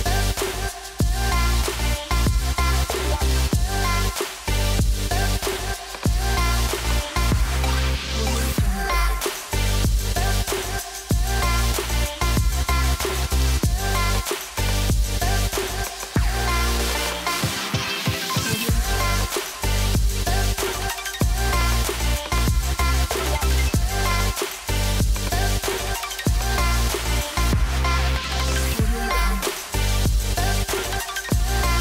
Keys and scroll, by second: 0.7-4.7 typing, 4.8 Return.